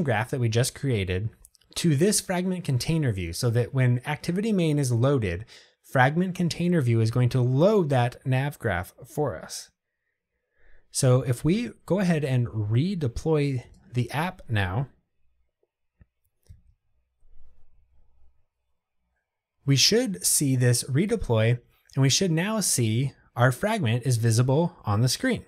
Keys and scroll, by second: 13.8 ctrl+r.